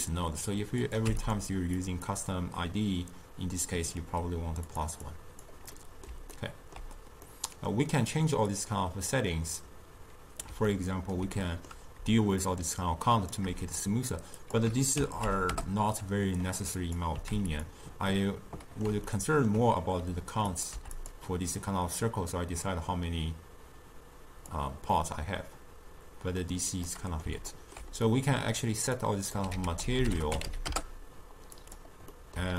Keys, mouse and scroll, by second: 1.8-4.8 drag, 5.1-5.8 drag, 5.8-8.6 middle drag, 8.6 click, 10.7 scroll down 1, 10.8 ctrl+middle click, 11.3 scroll up 1, 11.4 scroll down 1, 11.5-12.5 middle drag, 12.5-17.7 shift+drag, 18.1 scroll up 2, 18.2-20.5 middle drag, 20.5 click, 22.4-25.0 drag, 25.0-29.0 middle drag, 29.0 click, 29.6 ctrl+a, 32.2-32.5 middle drag.